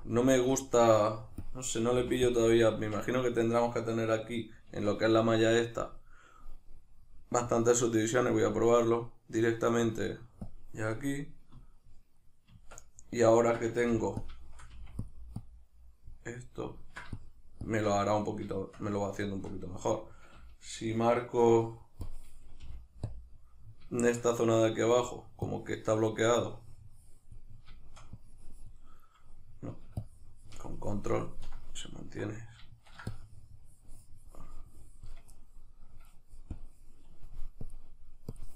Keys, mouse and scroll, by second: 0.1 click, 0.3-1.5 shift+middle drag, 1.5 click, 2.0 f, 2.7 Tab, 5.9-12.2 drag, 12.2-14.2 middle drag, 12.5 Tab, 13.8 f, 14.2 click, 14.4 shift+middle click, 14.7 f, 15.1 click, 16.4 middle click, 17.2 shift+click, 18.1-22.1 middle drag, 22.1-23.1 drag, 22.7 f, 23.7-25.5 middle drag, 25.5-27.5 drag, 27.5 shift+middle click, 28.2-31.7 drag, 31.7-33.1 middle drag, 33.1-35.7 shift+drag, 35.7 middle click, 36.6-38.5 drag.